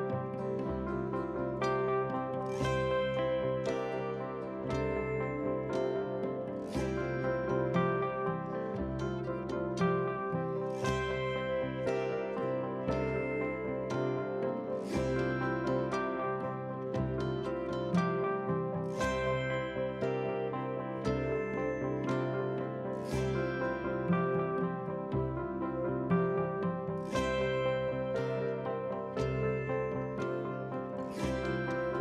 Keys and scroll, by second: 0.3 ctrl+v.